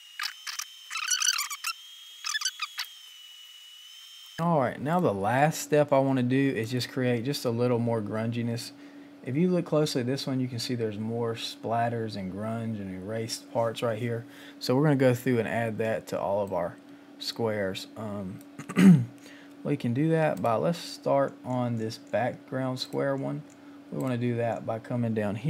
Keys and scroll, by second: 0.0-0.7 typing, 2.5-4.2 typing, 16.3 space.